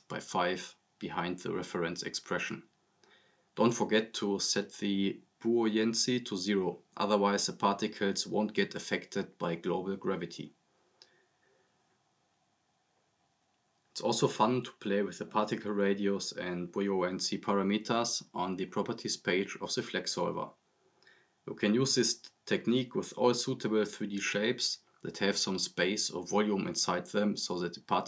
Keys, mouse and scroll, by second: 4.4 click, 7.5 scroll down 1, 8.0-8.4 drag, 14.9-15.3 click, 15.7 scroll up 1, 16.5 click, 18.8-19.7 drag.